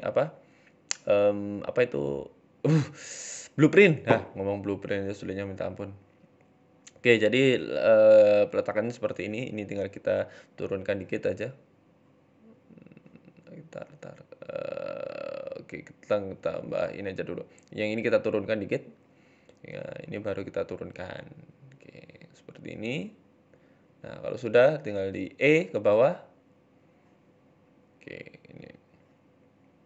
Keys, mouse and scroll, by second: 0.7 right click, 3.0 g, 3.6 middle click, 3.9 scroll down 5, 4.1 middle click, 4.7 scroll down 2, 4.8 middle click, 5.4 KP_1, 5.9 ctrl+KP_3, 6.3-7.4 scroll up 9, 6.6 shift+middle click, 7.4 right click, 7.4-7.8 scroll up 1, 8.0 middle click, 8.3-9.1 scroll down 8, 8.9 right click, 9.4 ctrl+KP_3, 9.9-10.6 scroll up 7, 11.2 g, 13.6 middle click, 13.9-14.3 scroll down 6, 14.6-15.2 scroll down 2, 15.2 ctrl+r, 15.2-15.6 scroll up 1, 17.8 g, 19.3 right click, 19.5 shift+middle click, 20.1 g, 21.4 middle click, 21.9 scroll down 1, 22.0 middle click, 22.5 alt+shift+right click, 23.2 KP_7, 23.7 ctrl+KP_3, 24.3-24.8 scroll up 4, 24.8 e, 26.0 middle click, 26.5 KP_3, 26.8-27.6 scroll down 4, 26.9 middle click, 27.8 shift+middle click, 28.3 right click, 28.8 KP_3, 29.4 KP_1, 29.8 scroll up 4.